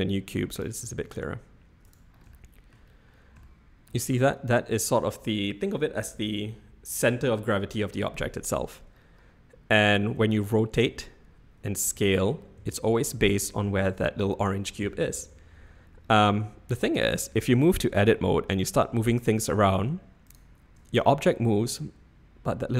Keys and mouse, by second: 0.9 g, 2.4 shift+click, 2.6 shift+middle click, 3.5 shift+middle click, 10.2 r, 12.4 s, 16.0 middle click, 16.5-17.2 drag, 17.2 Tab, 18.0 g, 20.8 Tab.